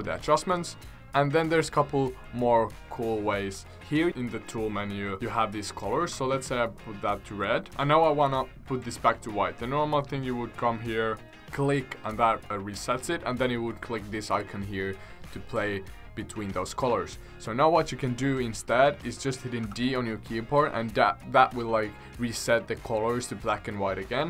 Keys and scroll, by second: 19.6 d.